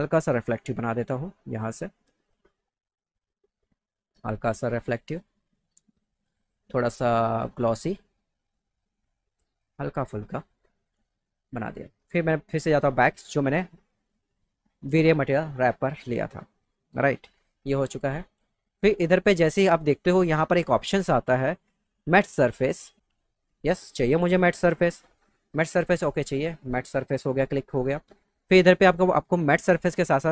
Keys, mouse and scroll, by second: 0.3 click, 1.5 click, 2.2 click, 2.9 click, 3.0 click, 4.7 click, 5.7 click, 6.4 click, 7.5 click, 10.1 click, 11.7 click, 12.7 click, 23.6 click.